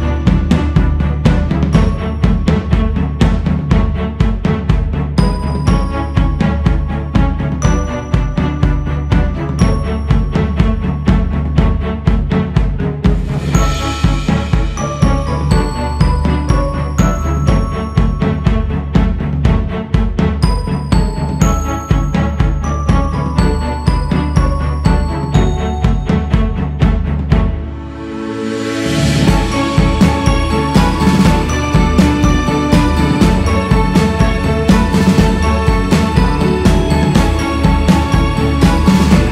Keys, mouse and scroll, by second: 5.6-6.6 scroll down 1, 6.7 click, 8.5-9.5 drag, 9.5-10.3 scroll up 1, 10.3-22.8 drag, 22.8-23.9 scroll down 7, 24.2 click, 25.3-26.1 scroll down 3, 26.1-26.6 scroll up 4, 26.8 click, 27.5-27.9 scroll up 1, 28.1 click, 29.0 click, 30.3-31.0 scroll up 1, 31.0-35.5 drag, 35.5-36.0 scroll down 5, 36.0-36.9 scroll down 2, 36.9 click, 37.9 click, 38.5 click.